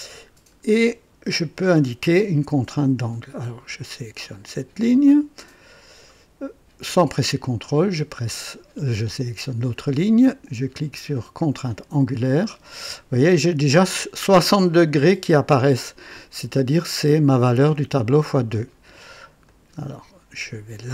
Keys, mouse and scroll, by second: 0.3-0.8 scroll up 2, 0.9 right click, 4.2 click, 7.4 click, 11.6 click, 19.4 click.